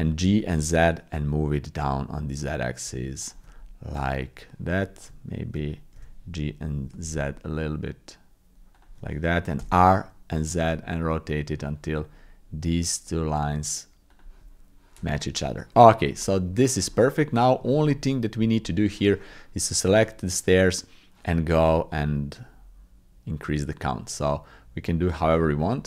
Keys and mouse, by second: 6.0 g, 9.6 r, 15.8 click, 16.6 shift+middle click, 16.9 middle click, 17.6 shift+middle click, 18.6 middle click, 19.8-25.2 drag, 25.6-25.8 middle drag.